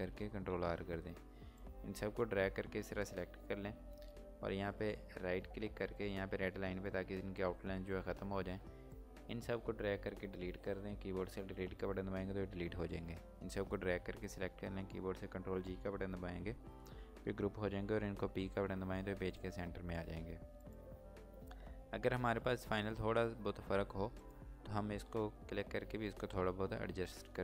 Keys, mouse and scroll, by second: 1.6 click, 6.5 click, 6.7 right click, 11.8 Delete, 13.2 click, 18.6 p, 19.4 click, 21.0-21.5 scroll up 1, 22.8 scroll down 1, 23.1-24.0 scroll up 1, 24.1 click, 25.5 Up.